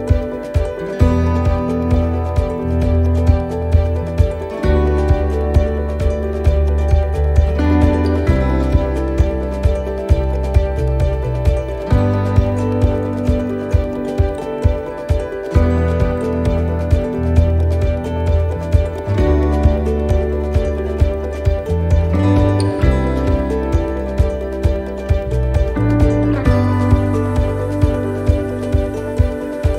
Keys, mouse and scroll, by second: 0.1 shift+right click, 1.3 right click, 2.0 shift+right click, 3.2 click, 5.9 right click, 7.0 middle click, 8.0 scroll up 1, 8.9 middle click, 9.9 scroll down 1, 10.6 right click, 11.2 middle click, 11.7 shift+middle click, 12.2 middle click, 12.8 right click, 14.2 right click, 16.1 right click, 16.1 middle click, 16.9 scroll up 3, 17.4 middle click, 17.8 shift+middle click, 18.1 scroll up 1, 18.4 middle click, 20.2 click.